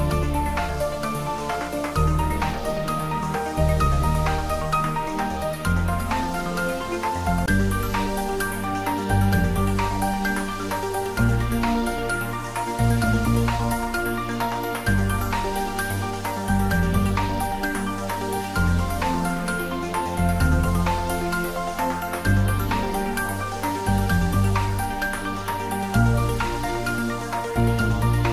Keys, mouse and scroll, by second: 1.6 shift+z, 2.6 shift+z, 3.0 scroll down 1, 4.2 click, 5.9 scroll down 1, 7.4 scroll up 1, 8.6 click, 9.6 s, 10.9 click, 11.5-12.7 typing, 14.7 click, 15.2 z, 16.3 shift+z, 16.6 scroll down 1, 17.6 click, 24.2 click, 26.8 click, 26.9 shift+z.